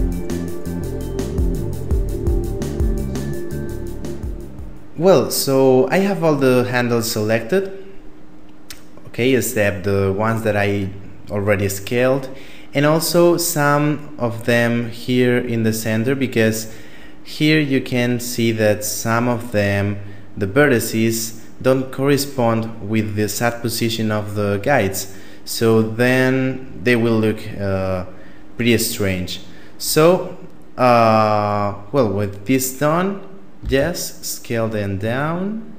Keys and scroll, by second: 33.4 s.